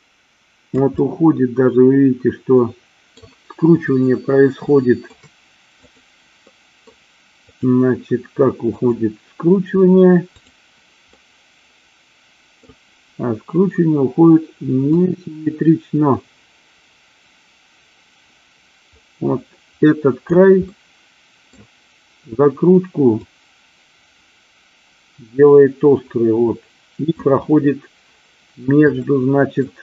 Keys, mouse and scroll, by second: 1.1-3.3 middle drag, 4.7 shift+scroll up 1, 4.8-5.2 shift+middle drag, 6.1 click, 6.6 scroll up 1, 6.7 middle click, 7.6 click, 8.8-11.1 drag, 11.2 scroll up 1, 11.3-12.8 middle drag, 15.1-20.3 drag, 20.8 middle click, 23.3-27.2 drag, 29.1 shift+middle click.